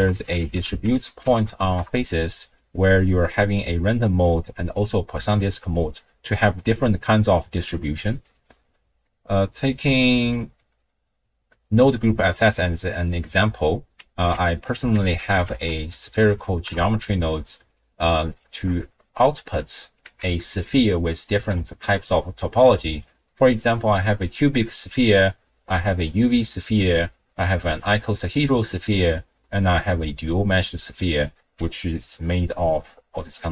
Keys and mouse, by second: 3.3-5.3 drag, 9.1 middle click, 10.1 x, 14.3 ctrl+a, 18.3 alt+shift+click, 20.0 z, 21.1-21.7 drag, 25.0-26.1 drag, 26.8-27.8 drag, 28.7-29.8 drag.